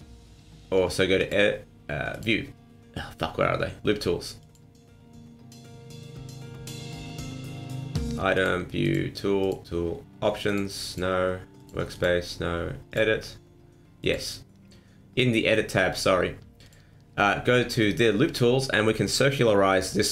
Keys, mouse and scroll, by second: 1.1 click, 2.1 click, 4.4 click, 7.6 click, 8.3 click, 8.8 click, 9.4 click, 10.5 click, 10.9 click, 11.6 click, 11.9 click, 12.9 click, 14.0 click, 16.6 click, 18.9 middle click, 19.8 middle click.